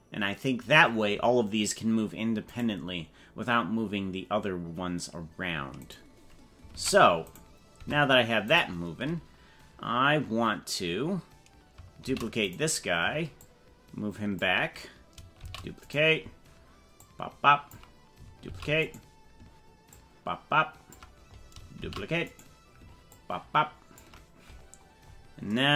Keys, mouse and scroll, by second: 1.0-1.7 scroll up 3, 2.5 right click, 5.9 right click, 6.7 ctrl+Tab, 7.9 Tab, 8.5 right click, 10.9 scroll down 2, 12.1 shift+d, 13.3-14.5 ctrl+drag, 15.4 shift+d, 16.9 ctrl+click, 18.5 shift+d, 19.9-20.9 ctrl+drag, 21.8 shift+d, 23.2 ctrl+click.